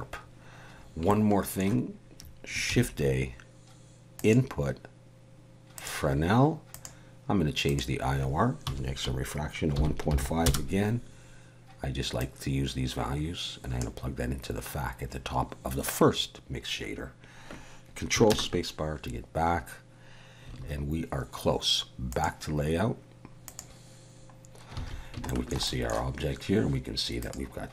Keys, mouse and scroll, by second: 23.6 click, 24.5-24.8 scroll down 1, 24.8 alt+a, 25.3 shift+middle click, 25.7 middle click, 27.2 click.